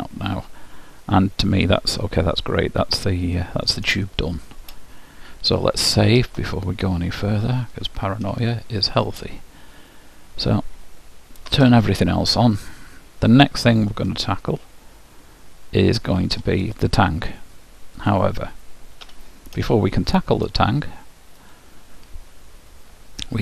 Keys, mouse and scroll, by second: 1.1-2.9 middle drag, 4.1-5.9 middle drag, 6.3 ctrl+w, 8.6-10.4 middle drag, 11.5 alt+h, 12.6-14.5 middle drag, 16.7-19.9 drag, 19.1 h, 19.9-21.6 middle drag, 21.6-23.4 drag.